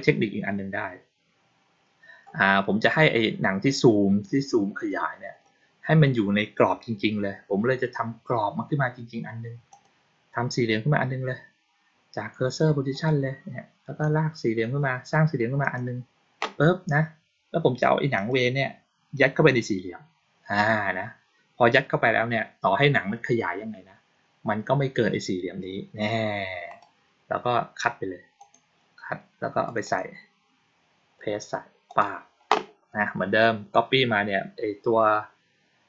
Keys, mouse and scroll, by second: 9.6 click, 12.8 click, 13.9 click, 15.5 click, 18.0 click, 26.5 right click, 28.3 click, 29.5 click, 29.7 click, 31.7 click.